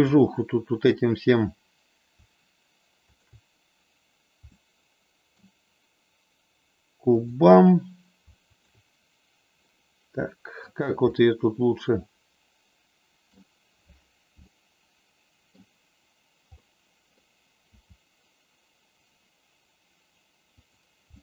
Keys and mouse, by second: 3.1 shift+click, 4.5 middle click, 7.1 click, 8.4 shift+click, 9.6-10.6 middle drag, 11.1-13.2 middle drag, 14.4-15.5 middle drag, 16.5 middle click, 17.6 r, 20.6 click, 21.1-21.2 middle drag.